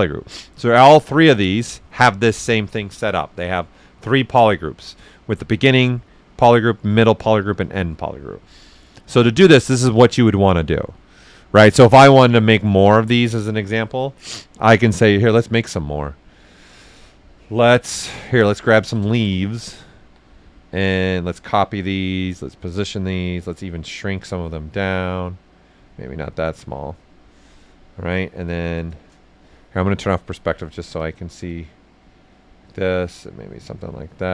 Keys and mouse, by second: 12.2 click, 16.0-17.9 drag, 16.0 typing, 18.4 ctrl+a, 18.8 ctrl+click, 20.0 w, 21.2 ctrl+click, 22.1-23.5 drag, 23.5-25.1 drag, 25.1 click, 25.9 click, 26.7-28.1 right drag, 28.1 alt+click, 28.9 right click, 29.9 click, 30.2 alt+right click, 31.5 ctrl+click, 32.6 ctrl+click, 33.6 ctrl+right click.